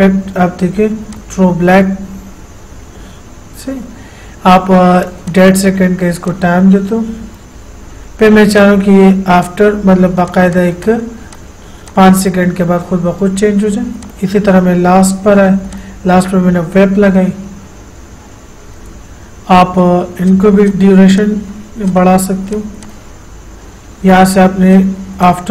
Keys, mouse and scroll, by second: 5.3 click, 14.3 click, 20.5 click.